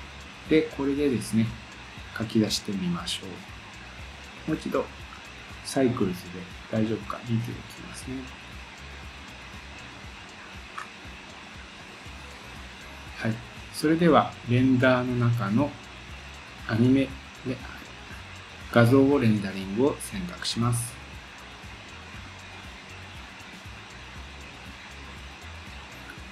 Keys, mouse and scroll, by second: 5.2 scroll up 2, 7.3 scroll down 2, 8.2 scroll down 4, 9.3-10.8 scroll down 4, 10.8-11.8 scroll up 1, 11.8 scroll down 2, 15.1-26.3 drag.